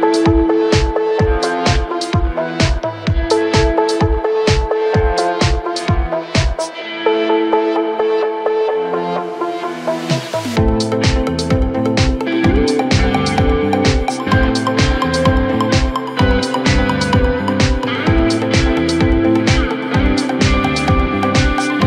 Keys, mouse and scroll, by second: 1.1-2.3 scroll up 3, 2.3 scroll up 1, 4.1 click, 4.5-5.7 scroll up 2, 5.7 click, 7.0 x, 8.8-9.3 scroll down 1, 9.3 Tab, 10.6-11.0 drag, 11.0-12.6 scroll down 7, 12.6-13.2 scroll down 1, 13.2-14.0 scroll up 1, 14.0 click, 15.0 Tab, 15.4-16.0 scroll down 1, 16.0-16.5 scroll up 1, 16.5 g, 21.7 Tab.